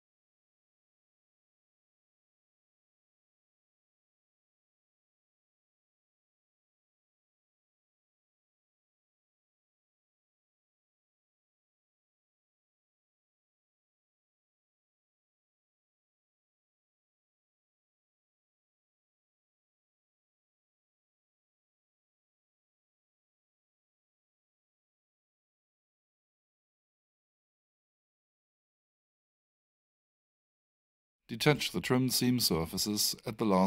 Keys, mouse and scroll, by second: 0.4 click, 1.5 space, 2.0 alt+space, 2.3 alt+shift+right click, 3.0 alt+shift+middle click, 4.3 click, 5.4 space, 5.7 click, 8.3 alt+shift+right click, 9.0 alt+shift+middle click, 9.9 alt+shift+click, 10.8 alt+shift+right click, 14.1 click, 16.7 alt+l, 18.9 ctrl+c, 19.9 click, 21.2 right click, 23.7 click, 25.6 alt+shift+right click, 26.3 alt+shift+middle click, 27.2 alt+shift+click, 28.1 alt+shift+middle click, 29.7 click, 31.0 ctrl+click, 31.9 space, 32.7 click.